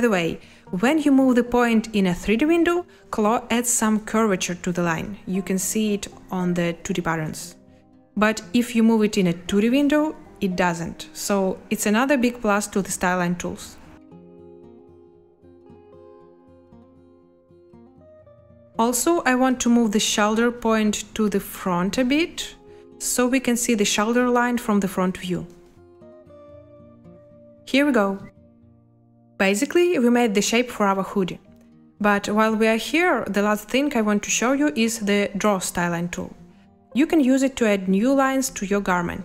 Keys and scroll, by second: 0.1 Escape, 7.3 Escape, 8.5 z, 11.5 Escape, 25.0 space, 27.6 space, 28.3 z.